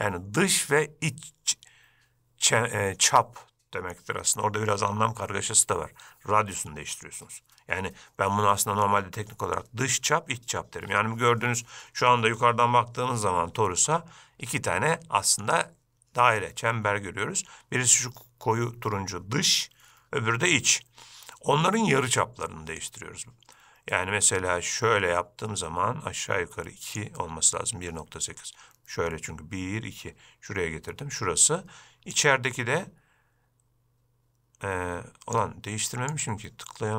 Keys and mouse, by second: 14.7-15.6 shift+middle drag, 23.1-27.2 drag, 32.3-35.6 drag, 36.5-36.9 drag.